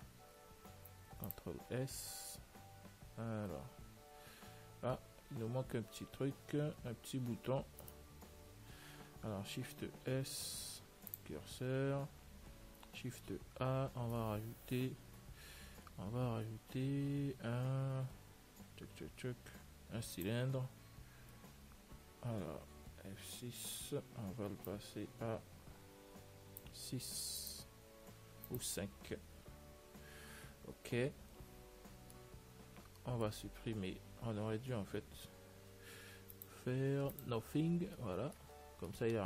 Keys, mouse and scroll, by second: 0.6 middle click, 1.4 ctrl+s, 1.9 middle click, 2.6 z, 3.0-4.9 middle drag, 5.3 z, 6.7 Tab, 7.3 middle click, 8.1-10.0 right drag, 10.2 shift+s, 13.4 shift+a, 13.8-16.7 middle drag, 23.1 F6, 32.6-35.4 middle drag, 35.4 F6, 38.1-38.5 scroll up 1, 38.5-39.2 middle drag.